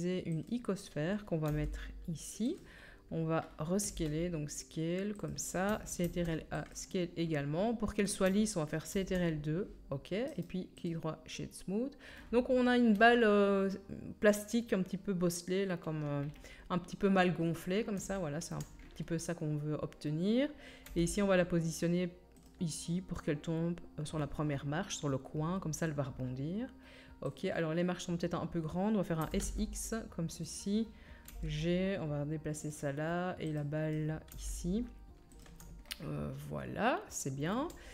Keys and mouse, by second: 0.5-2.5 middle drag, 1.5 g, 2.5-6.7 drag, 2.5 right click, 3.8 s, 6.0 ctrl+a, 6.7-15.6 right drag, 8.9 ctrl+2, 15.6-23.9 middle drag, 20.9 g, 23.9-27.3 drag, 27.3 middle click, 27.4-31.5 drag, 29.2 s, 31.3 g, 31.5-37.9 right drag, 33.5 click, 33.5 middle click, 34.3 g.